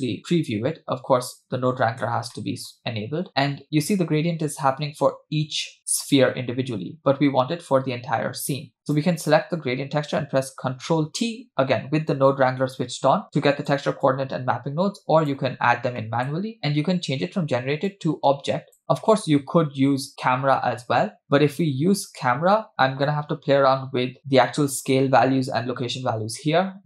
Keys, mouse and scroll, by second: 2.3 middle click, 8.8 shift+a, 8.8 click, 11.4 ctrl+t, 13.0-13.3 scroll down 2, 13.3 click, 14.1-15.4 drag, 15.6-16.0 scroll up 2, 16.0 middle click, 17.9-18.9 drag, 23.1 middle click.